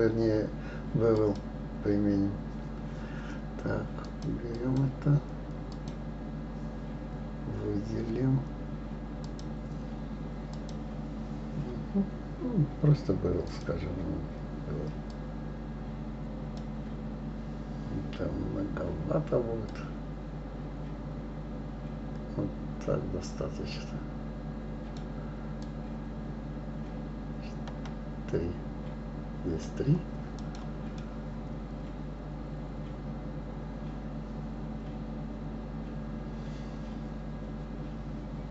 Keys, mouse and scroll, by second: 1.1-4.2 drag, 4.5 click, 5.7-8.7 drag, 9.2-12.2 drag, 13.5-16.5 drag, 19.7-22.7 drag, 25.6-28.6 drag, 30.4 click, 31.0-34.1 middle drag.